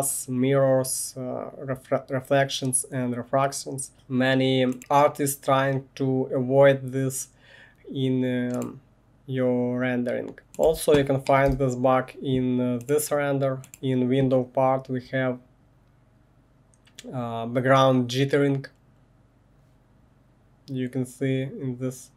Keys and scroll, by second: 10.4 space, 10.7 1, 11.5 space.